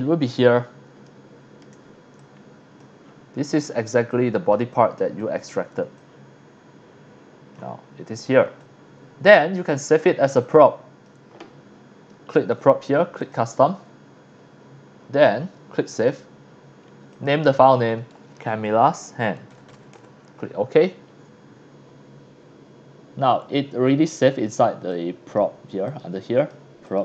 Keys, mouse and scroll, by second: 0.2-0.7 scroll up 2, 1.0 shift+middle drag, 2.2-2.8 drag, 2.2 x, 3.0-3.8 scroll up 3, 4.1 click, 4.7 drag, 5.2 click, 6.0-7.5 drag, 7.8 scroll up 2, 8.3 scroll down 1, 8.5 x, 8.6-9.2 drag, 9.4 scroll up 2, 10.0 middle click, 10.0 scroll down 1, 10.3 x, 10.4-11.0 drag, 12.3 click, 13.2 click, 15.9 click, 17.1 click, 17.5 click, 17.9-20.2 typing, 24.9 click, 25.9 click, 26.3 click, 26.9 click.